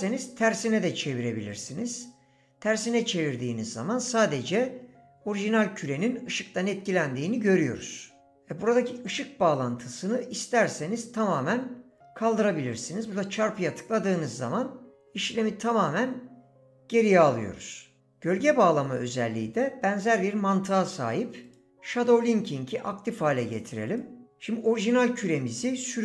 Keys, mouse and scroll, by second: 1.5 click, 21.4 click, 23.9 click, 25.3 drag.